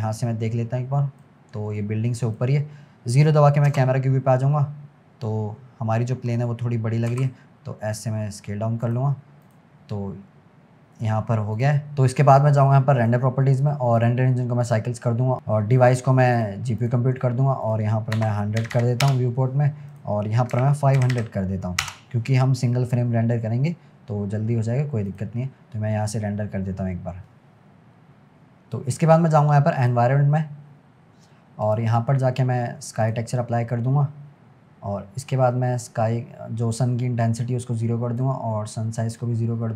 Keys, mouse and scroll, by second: 1.4-1.8 scroll down 1, 1.8-3.7 middle drag, 3.7 KP_0, 4.8-5.2 scroll up 3, 6.0-7.1 scroll down 2, 7.1 s, 9.5 click, 10.2-11.6 scroll down 4, 11.6 click, 13.0 click, 14.0-18.8 drag, 18.8 0, 19.9-21.1 drag, 21.1 0, 26.8 click, 29.8 click, 31.7-34.0 drag, 34.0-34.6 scroll up 3, 34.8 scroll down 1, 35.9-37.3 drag, 37.3-37.7 scroll down 1, 38.2-39.7 drag.